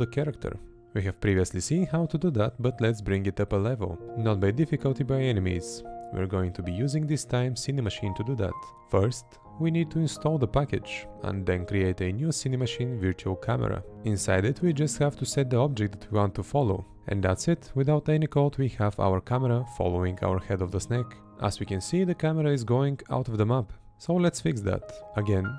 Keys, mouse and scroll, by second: 2.2 Left, 3.5 Right, 5.1 Left, 6.7 Right, 8.2 Right, 12.2 Right, 14.7 Right, 15.3 Right, 22.1 Right, 23.4 Left, 25.0 Right.